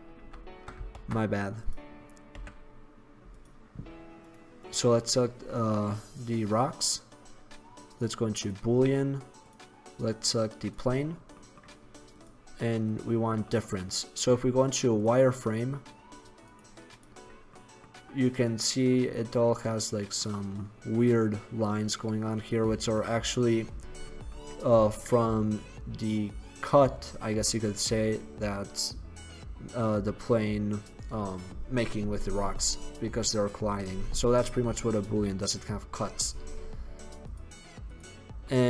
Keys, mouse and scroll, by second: 0.3 shift+c, 1.0 shift+a, 2.4 s, 7.0-8.5 middle drag, 11.3-12.2 middle drag, 13.6-15.1 middle drag, 15.1 drag, 16.0 middle drag, 17.5-19.6 middle drag, 38.4-38.6 middle drag.